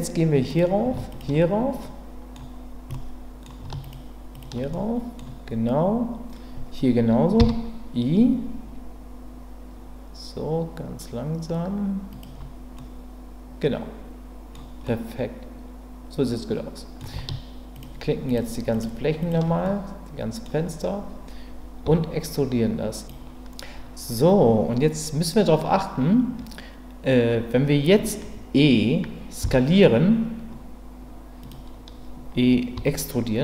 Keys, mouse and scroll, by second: 1.8 middle click, 2.9 middle click, 3.9 shift+click, 4.7 middle click, 7.4 i, 12.1 click, 12.7-14.5 middle drag, 14.9-17.0 middle drag, 17.7 shift+click, 18.3 shift+click, 19.2 shift+click, 19.6 middle click, 21.8 e, 32.7 e.